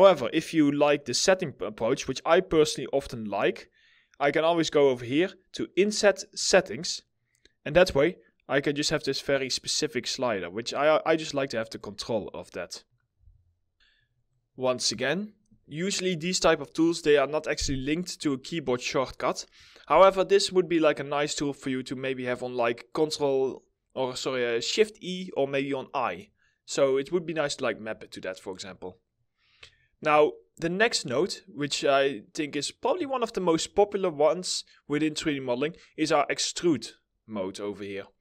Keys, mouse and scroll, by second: 11.0 middle click, 11.4 scroll up 1, 27.1-27.4 scroll down 1, 27.5 alt+middle click, 28.4 middle click, 29.2 alt+scroll, 29.2 alt+scroll up 1, 29.4 alt+middle click.